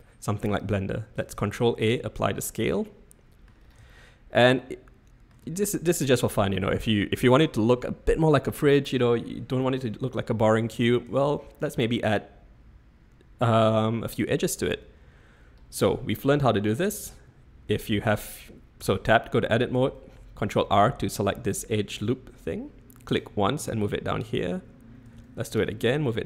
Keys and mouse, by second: 1.3 ctrl+a, 3.0-3.5 drag, 4.0-5.4 shift+drag, 6.9-7.6 drag, 11.1 Tab, 17.8 Tab, 18.8 Tab, 19.7 ctrl+r, 25.1 ctrl+r.